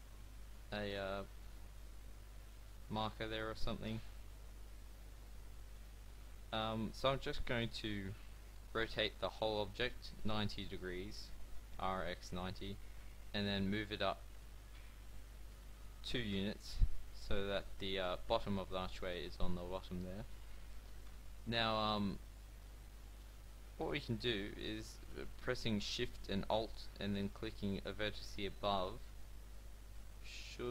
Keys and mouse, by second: 1.5 middle click, 6.5 Tab, 8.5 r, 12.7 g, 15.4 g, 17.7 middle click, 21.0 Tab, 23.8-26.2 middle drag.